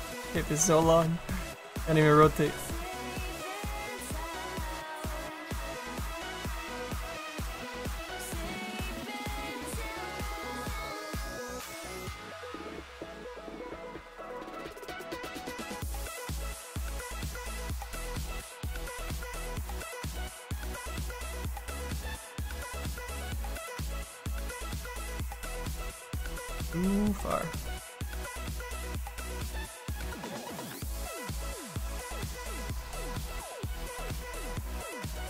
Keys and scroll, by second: 10.4 s, 21.8 s, 23.9 s, 25.4 s, 28.9 s.